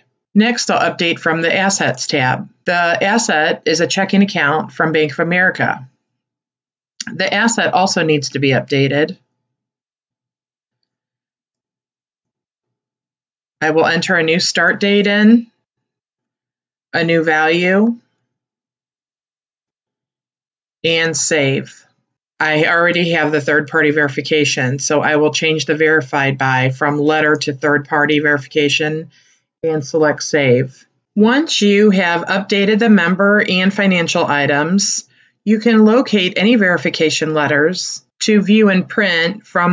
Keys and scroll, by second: 17.9 7, 18.9 1, 19.0 3, 19.5 ., 19.6 0.